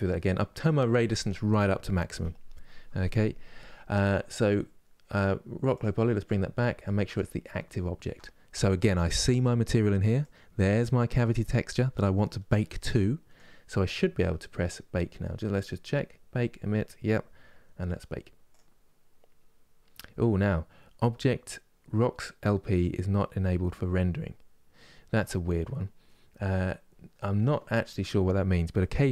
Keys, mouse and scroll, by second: 6.8 ctrl+click, 8.3-18.7 middle drag, 18.7 click.